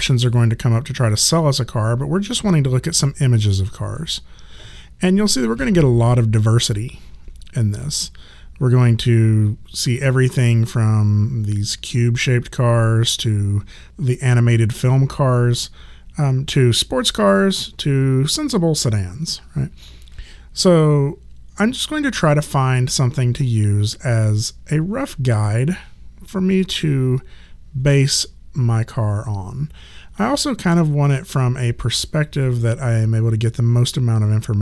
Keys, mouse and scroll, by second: 2.9 click.